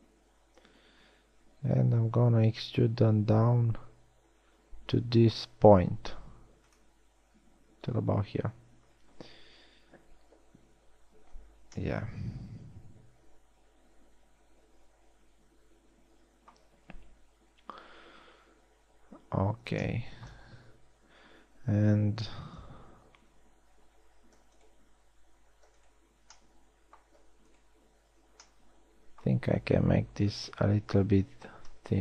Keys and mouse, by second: 1.2 e, 12.0 z, 30.9 s.